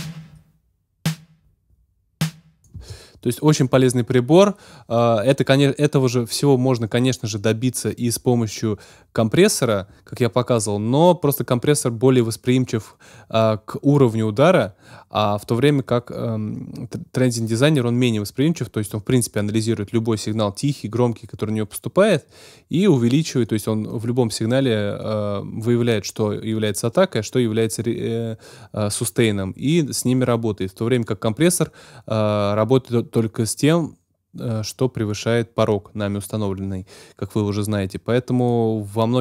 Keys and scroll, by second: 2.7 space.